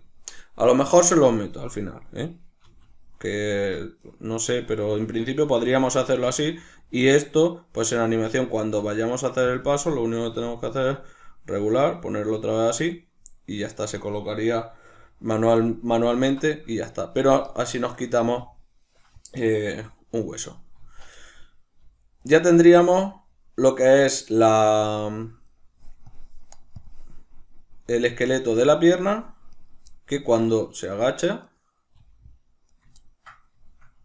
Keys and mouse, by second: 2.6 r, 4.0 right click, 4.6 r, 5.3 right click, 5.7-7.8 ctrl+middle drag, 6.1 r, 7.8 right click, 8.7 r, 9.4 click, 9.8 right click, 10.2 r, 12.6 shift+click, 14.8 alt+r, 15.6 right click, 16.0 alt+r, 16.9 right click, 18.2-20.2 ctrl+middle drag, 19.6 g, 20.2 right click, 20.7-22.2 middle drag, 20.7 z, 21.7 g, 22.2 right click, 22.4 z, 23.1-25.5 middle drag, 24.9 g, 25.5 right click, 27.1-28.3 middle drag, 27.7 g, 28.3 right click, 29.4 right click, 30.4 right click, 30.8 right click, 31.0 right click, 31.3 right click, 31.8 g, 32.7 right click, 32.9-34.0 ctrl+middle drag, 33.8 g.